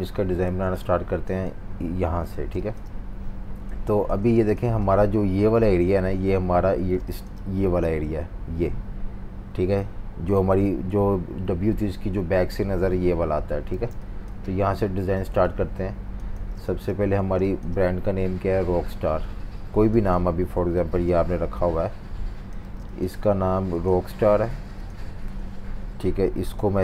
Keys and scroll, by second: 0.5 z, 1.6-4.7 typing, 6.8 typing, 15.1 z, 16.3-17.3 typing, 22.6 typing.